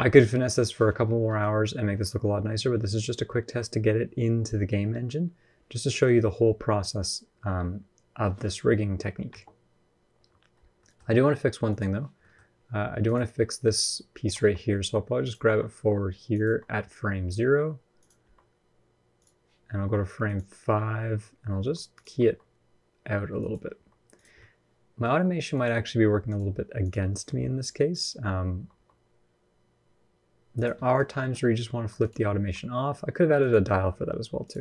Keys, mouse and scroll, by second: 1.0 middle click, 9.1 space, 9.5-9.8 scroll up 1, 10.3 scroll up 4, 10.6 shift+middle click, 11.5 click, 12.0 middle click, 12.2-12.8 scroll up 1, 12.8 click, 14.0 r, 15.2 r, 16.2 r, 18.0 r, 20.0 click, 21.4 r, 21.8 r, 23.4 r, 24.1 middle click, 25.3 click, 28.3 r, 30.6 middle click, 30.8-31.1 scroll down 3, 30.9 middle click, 31.1-31.5 scroll up 2, 31.5 r, 32.2 r, 33.5 r, 34.5 r.